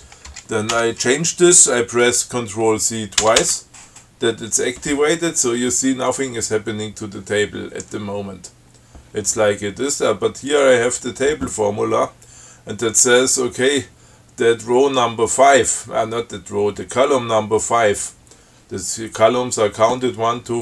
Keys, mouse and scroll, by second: 0.5 BackSpace, 0.9 6, 3.4 ctrl+c, 10.7 click.